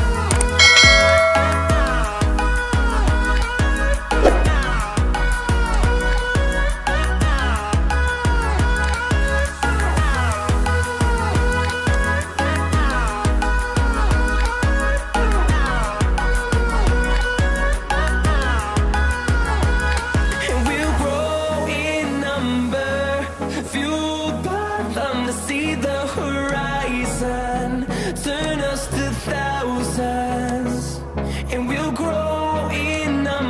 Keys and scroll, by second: 10.7 ctrl+t.